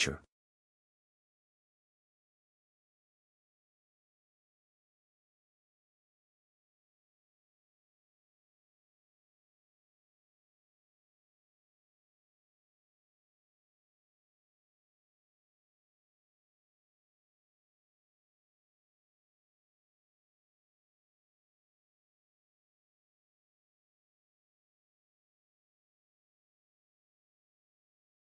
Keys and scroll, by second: 0.0-3.5 typing, 4.5 ctrl+s, 8.9-10.9 typing, 11.6 Tab, 12.8 ctrl+s, 15.8 ;, 17.0 ctrl+s, 24.9 Return.